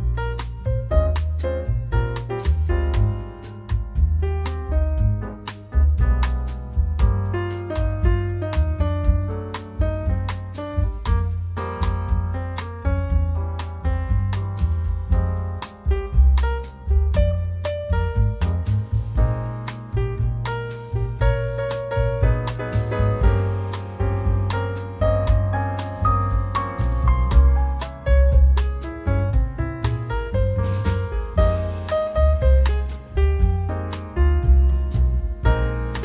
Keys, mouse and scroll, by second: 0.0-4.3 drag, 4.7 scroll down 1, 5.4 scroll up 1, 6.7 click, 7.9 click, 9.5-10.9 drag, 11.5 click, 12.5 click, 16.2 click, 17.1 click, 21.6 click, 22.9 click, 23.9 click, 26.2 click, 26.6 click, 27.3 click, 28.7 click, 30.9 click, 32.3 6, 32.8 click, 33.4 click, 33.8-36.0 drag.